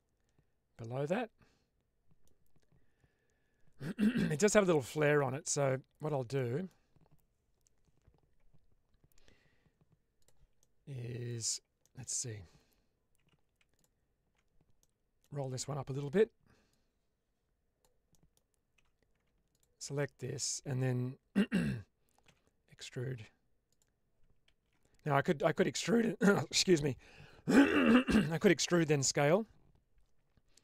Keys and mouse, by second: 4.8 middle click, 5.3 Tab, 6.3 middle click, 10.1 click, 10.5 middle click, 11.7 middle click, 13.1 typing, 14.6-15.3 typing, 14.7 middle click, 16.6-17.7 drag, 18.0 middle click, 18.7 typing, 19.4 ctrl+alt+click, 19.8 middle click, 22.2 e, 24.4 ctrl+z.